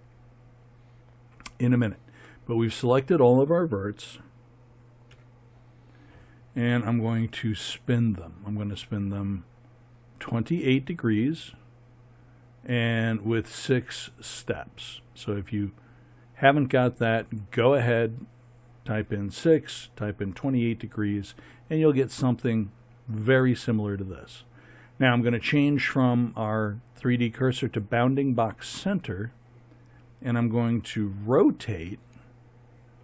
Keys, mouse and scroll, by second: 5.1 KP_3.